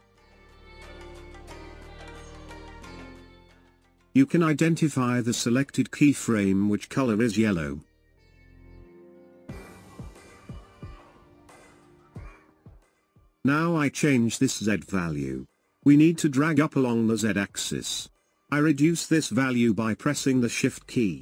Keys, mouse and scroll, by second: 17.1-20.2 shift+drag.